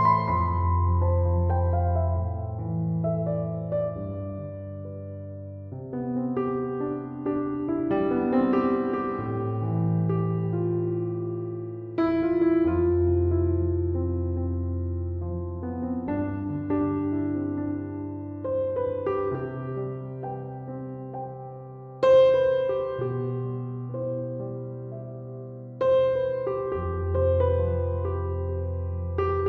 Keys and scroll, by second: 4.2 Escape, 18.3 2, 18.6 Return, 25.1 1, 26.3 Return, 28.2 ctrl+7.